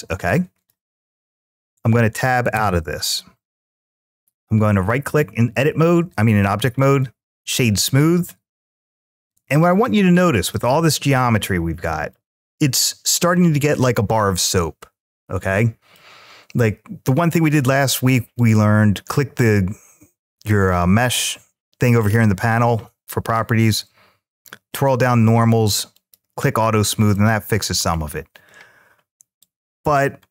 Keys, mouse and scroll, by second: 0.4 click, 0.9 middle click, 2.3 Tab, 3.9-6.8 right drag, 7.8-10.3 middle drag, 11.1-11.9 middle drag, 15.4-15.8 middle drag, 18.1 click, 21.7-22.5 scroll down 2, 24.5 click, 25.7 click, 26.9-27.6 middle drag, 27.7 scroll down 1, 29.2-29.7 drag, 30.1-30.3 middle drag.